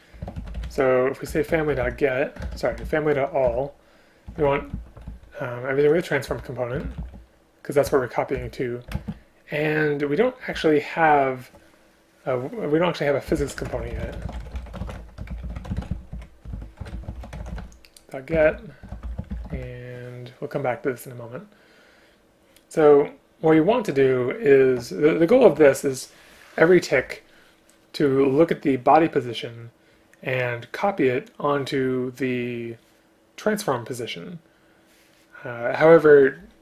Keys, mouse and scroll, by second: 1.3 Return, 2.5 BackSpace, 3.5 Return, 6.4 Return, 8.4 Return, 9.0 space, 18.4 Return, 19.2 shift+space, 19.6 Return.